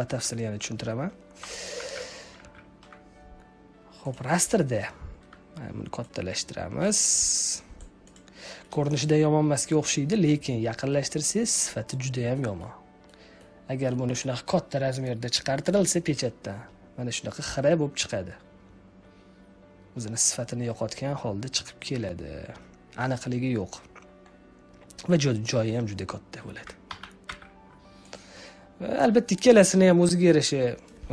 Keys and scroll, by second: 1.7 ctrl+z, 2.4 z, 26.8 ctrl+z.